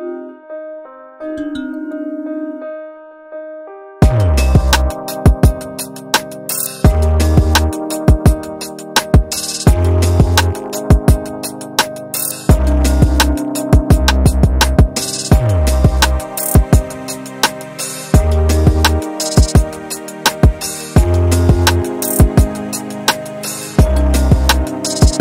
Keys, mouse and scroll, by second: 1.0-1.6 scroll down 4, 1.3 click, 1.6-3.0 middle drag, 3.0 KP_1, 4.1-4.6 middle drag, 4.6-5.3 scroll up 8, 5.3 scroll down 3, 5.6 KP_1, 6.2 click, 6.5-6.8 shift+middle drag, 6.8 scroll up 2, 7.4-7.8 shift+middle drag, 7.8-8.3 scroll up 3, 8.3 Tab, 8.8-10.4 shift+middle drag, 10.4 ctrl+r, 12.6 shift+middle click, 13.0 g, 15.5 ctrl+r, 17.5 alt+click, 18.0 g, 20.2 alt+click, 20.6 g, 22.5 r, 23.2 s, 24.4 alt+click, 24.8 g.